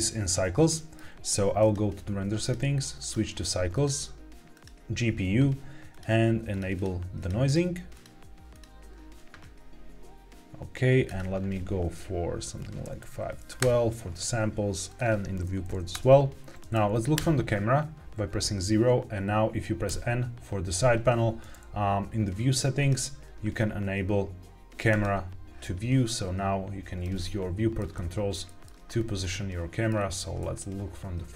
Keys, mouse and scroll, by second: 0.0-0.5 scroll down 2, 0.6 shift+middle click, 1.0-1.5 shift+scroll down 1, 1.5 click, 2.3-3.1 drag, 3.6-4.6 drag, 5.8 click, 6.4 click, 6.7 click, 7.1 click, 7.3 click, 7.8 click, 11.0-13.6 drag, 14.8-15.8 drag, 16.5 middle click, 16.5-17.1 scroll up 2, 17.1 KP_0, 19.8 n, 22.7 click, 24.8 click, 26.0 middle click, 27.1 shift+middle click, 27.8 middle click, 28.8-29.2 scroll up 2, 29.2 middle click, 29.9-30.2 scroll down 2, 30.3 shift+middle click.